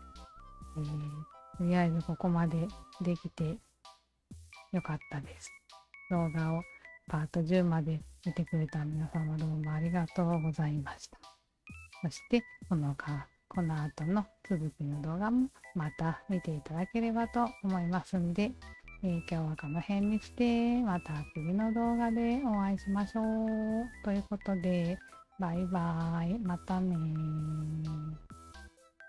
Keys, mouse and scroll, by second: 0.2 alt+drag, 0.6 alt+drag, 1.0 alt+drag, 1.4 alt+drag, 1.7-3.1 alt+drag, 6.5-7.6 alt+drag, 10.6-11.1 alt+drag, 11.4 alt+click, 11.8 alt+drag, 12.2-15.4 alt+drag.